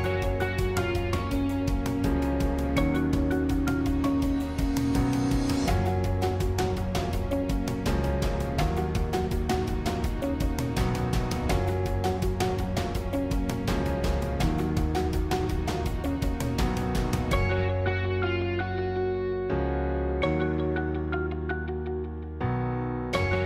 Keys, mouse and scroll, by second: 2.1 click, 3.0 s, 9.7 g, 14.0 click, 14.4-16.8 middle drag, 16.8 alt+shift+click, 19.7 alt+shift+click, 20.5-22.1 middle drag, 22.1 alt+shift+click.